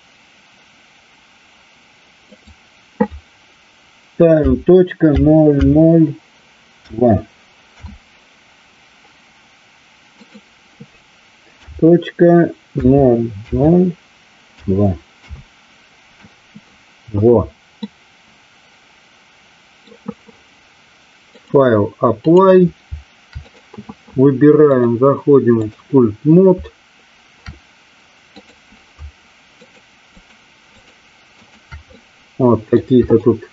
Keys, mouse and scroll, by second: 2.2-8.9 drag, 10.2-16.1 drag, 17.9-20.0 middle drag, 21.2-22.4 drag, 23.5 click, 24.8-25.9 drag, 28.4 click, 29.6 shift+click, 30.1 shift+click, 30.8 shift+click, 31.9-32.9 middle drag, 33.2-33.5 shift+drag.